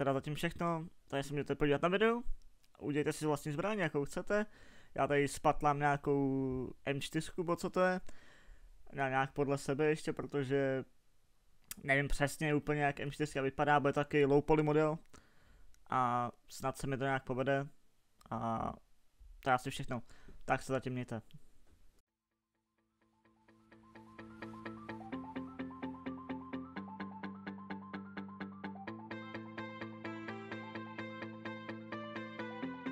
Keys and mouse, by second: 1.4 shift+a, 3.4 s, 4.5 g, 9.3 z, 10.5 Tab, 15.9 click, 16.1 ctrl+r, 17.3 ctrl+r, 17.8 b, 18.4 ctrl+z, 21.0 ctrl+z, 21.2 c, 23.5 ctrl+r, 25.7 e, 27.0-28.9 typing, 31.4-32.9 middle drag, 32.2 Tab.